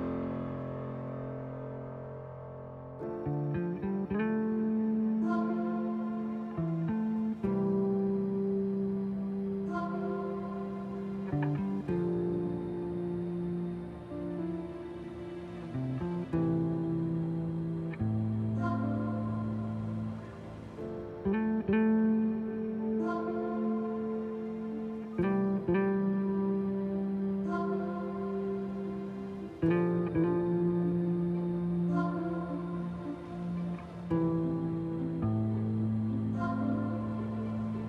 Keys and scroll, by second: 2.0 t, 5.6 ctrl+z, 6.2 b, 8.6 Delete, 8.9 ctrl+z, 9.1 Delete, 12.2 ctrl+z, 15.8 ctrl+z, 20.5 Delete, 25.1 3, 35.3 b, 35.6 Delete, 36.6 b.